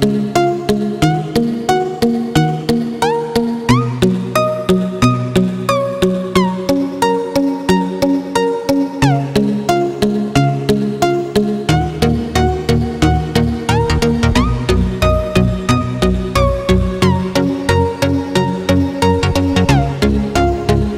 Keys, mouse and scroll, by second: 0.8-1.2 alt+scroll up 1, 3.9-4.6 alt+scroll down 2, 5.0 alt+scroll up 1, 5.6 alt+scroll up 1, 7.4 click, 15.9 alt+Tab, 17.3 click, 18.5-20.9 scroll down 1.